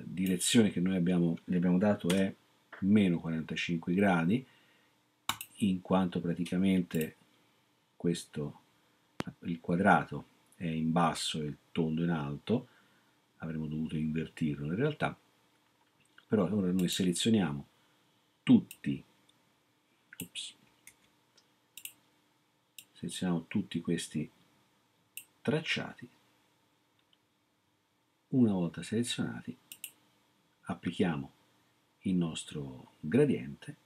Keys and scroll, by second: 2.1 Return, 20.9 ctrl+z.